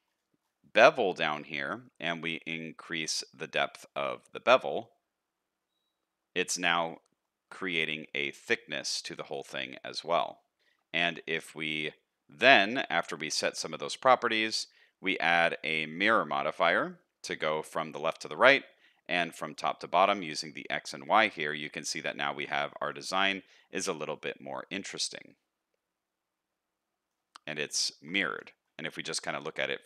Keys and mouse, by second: 7.3 shift+middle click, 8.8 middle click, 10.5 middle click, 11.0 shift+middle click, 11.3 middle click, 17.1 middle click, 21.4-22.9 middle drag, 23.5 middle click, 24.8-27.2 middle drag, 27.8 shift+middle click, 28.3 Tab, 28.6 middle click, 29.4-29.8 middle drag.